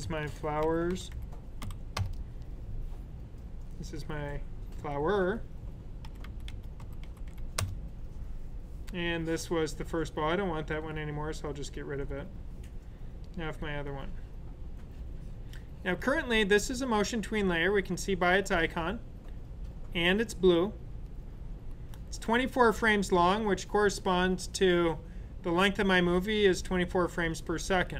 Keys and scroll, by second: 0.0-2.0 typing, 5.7-7.7 typing.